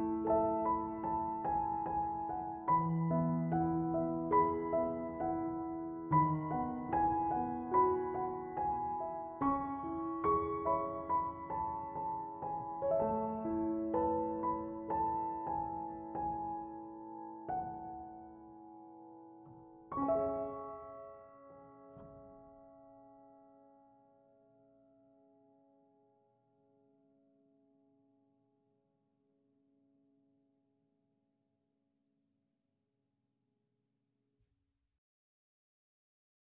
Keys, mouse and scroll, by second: 36.4 5.